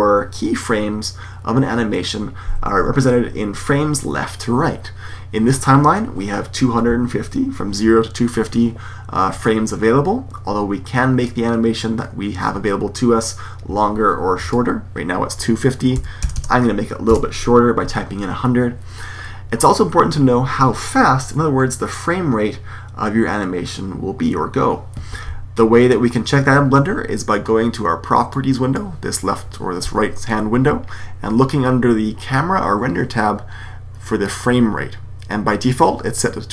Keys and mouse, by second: 14.4-16.1 drag, 16.3 KP_0, 28.3-29.9 drag.